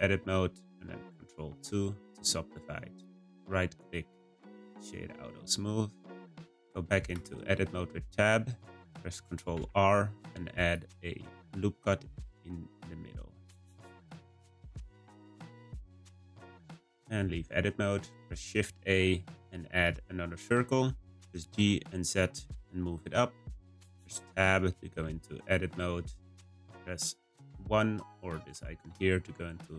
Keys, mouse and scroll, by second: 1.5 ctrl+2, 3.0-4.7 right drag, 4.7-7.1 middle drag, 7.1 Tab, 9.5 r, 13.9-15.5 right drag, 16.1 Tab, 16.8-18.3 scroll down 1, 18.3 shift+a, 21.1 g, 24.4 Tab, 25.2 shift+middle click, 25.9-26.9 scroll up 1, 28.1-29.7 drag.